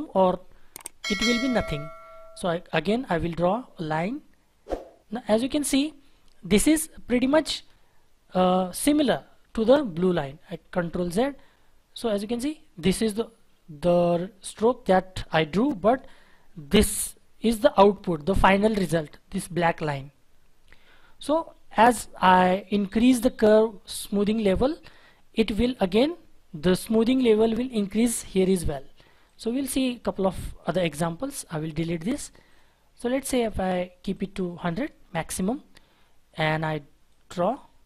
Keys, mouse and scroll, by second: 4.6-5.1 scroll up 1, 5.4-8.4 scroll down 1, 11.7-12.4 scroll up 1, 12.4-14.0 scroll down 1, 14.0-15.8 scroll up 1, 29.7-30.0 scroll down 1, 31.1 Delete, 35.0-35.8 scroll down 1, 35.8-37.1 scroll up 1.